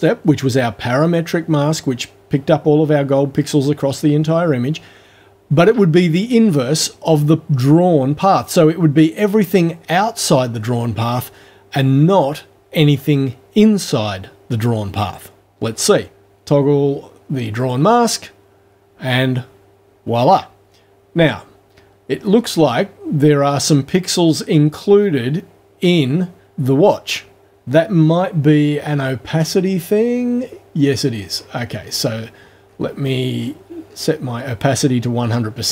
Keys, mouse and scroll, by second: 17.6 click, 29.4 ctrl+scroll up 2, 30.2-30.6 ctrl+scroll down 2, 30.9 ctrl+scroll down 2, 31.3-32.0 ctrl+scroll up 4, 32.6-34.1 ctrl+scroll up 8.